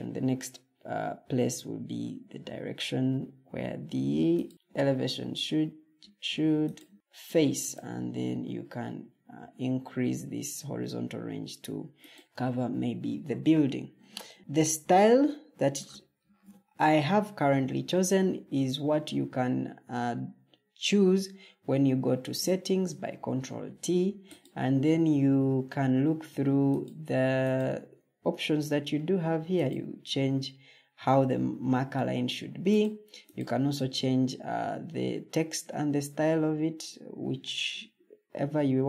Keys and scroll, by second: 16.1 ctrl+t.